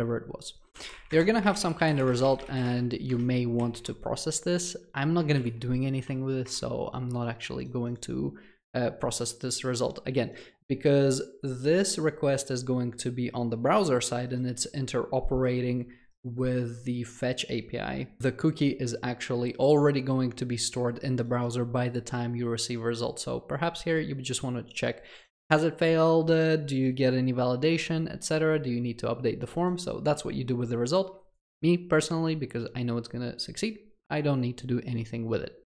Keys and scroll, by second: 5.4 alt+Return.